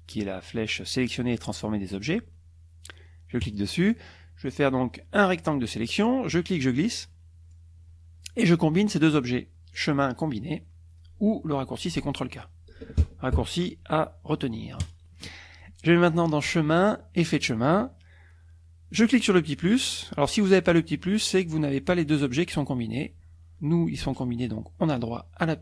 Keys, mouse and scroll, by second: 3.4 click, 6.4-7.7 drag, 9.8 click, 14.8 click, 16.2 click, 17.2 click.